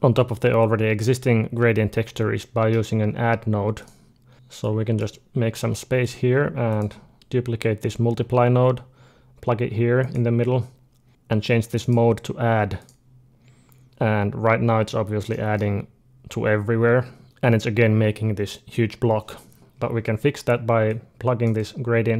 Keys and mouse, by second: 2.2-4.2 middle drag, 2.9 g, 4.3 ctrl+z, 4.3-8.6 drag, 5.4 g, 8.0 shift+d, 10.0-11.1 drag, 11.6-13.6 drag, 14.6-17.2 middle drag, 20.7-22.1 drag.